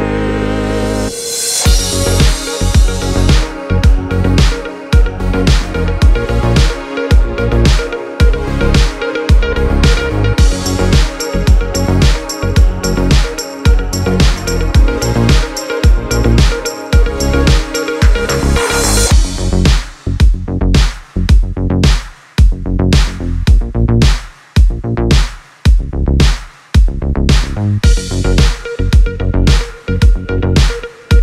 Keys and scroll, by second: 18.4 space, 26.3 p, 28.3 u.